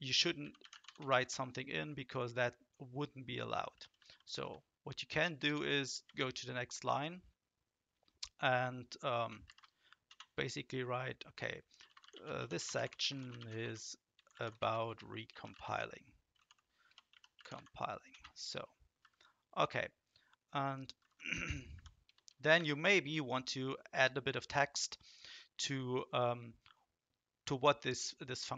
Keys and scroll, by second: 0.1-1.3 typing, 3.7 BackSpace, 3.9 BackSpace, 4.1 BackSpace, 4.2 BackSpace, 5.4 shift+Return, 9.4 ctrl+shift+?, 10.1 space, 11.6-18.1 typing, 19.0 Down, 21.0 Down, 21.1 Down, 21.4 Down, 21.7 Up, 22.0-23.0 typing.